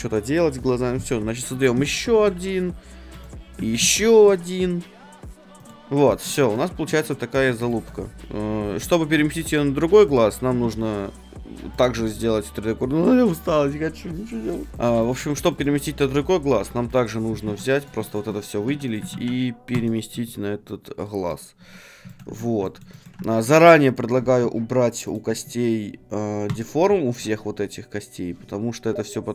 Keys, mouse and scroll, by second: 1.7 shift+a, 2.1 g, 3.2-5.3 drag, 3.8 shift+a, 4.2 g, 5.7-7.7 drag, 8.6 Tab, 10.1-12.0 right drag, 10.6 shift+s, 12.0-14.7 middle drag, 14.7-16.3 right drag, 14.7-17.5 middle drag, 16.9-20.9 right drag, 17.4 Tab, 18.6 shift+d, 20.2 middle click, 21.6 Tab, 23.4-25.0 right drag, 25.0-28.5 drag.